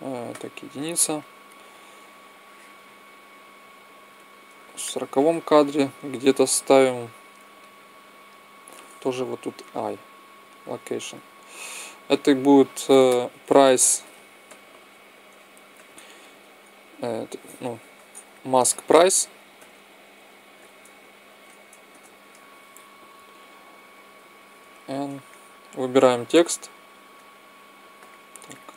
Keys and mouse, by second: 0.2 KP_1, 1.9-3.8 drag, 4.7 middle click, 9.0 i, 11.7-13.5 drag, 24.5 n, 25.8-27.3 drag, 27.3 middle click, 27.3 z, 28.3-28.7 drag.